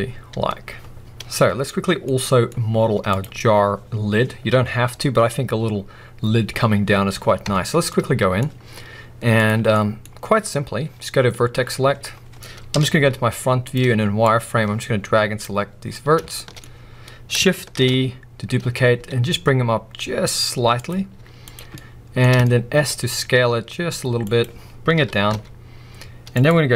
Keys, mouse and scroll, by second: 2.1 middle click, 2.5-3.1 scroll up 1, 3.1 click, 7.5 Tab, 7.9-9.5 middle drag, 9.5 click, 9.7 middle click, 10.7-11.0 scroll up 2, 11.0 middle click, 12.0-12.7 scroll down 1, 12.7 KP_1, 12.9 z, 14.3 click, 16.3 shift+middle click, 16.6-17.8 scroll up 1, 17.8 shift+d, 20.8 click, 21.1 z, 21.6 scroll up 1, 21.8-23.2 middle drag, 23.2 s, 24.4 click, 25.0 g, 26.4 click.